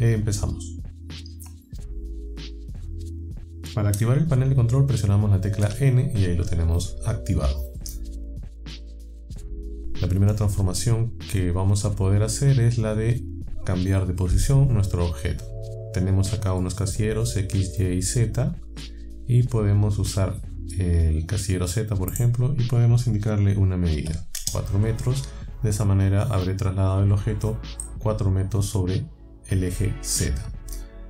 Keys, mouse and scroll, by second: 5.6 n, 22.1 click, 24.0 KP_4, 24.4 KP_Enter.